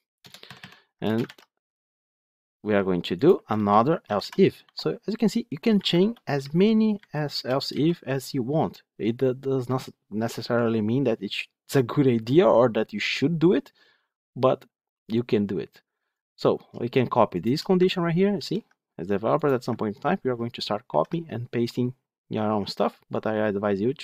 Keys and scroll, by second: 1.2 ctrl+v, 18.2 ctrl+c, 20.7 ctrl+v.